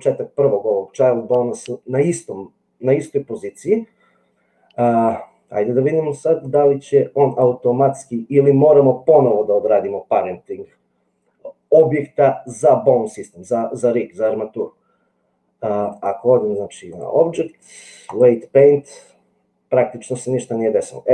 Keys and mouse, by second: 6.7 click, 15.9 click, 16.9-18.4 drag.